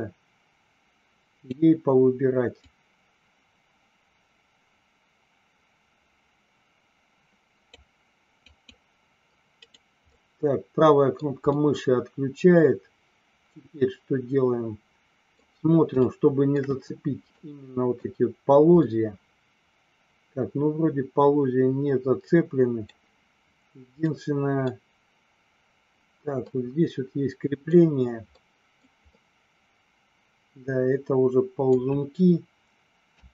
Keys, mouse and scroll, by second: 2.6-7.8 drag, 8.4 click, 9.5 right click, 10.2 middle click, 11.5-15.3 middle drag, 16.0 shift+middle click, 17.3 middle click, 18.8-23.2 middle drag, 24.2 middle click, 26.4-27.8 middle drag, 28.3 middle click, 29.2-32.0 middle drag, 33.0 KP_3.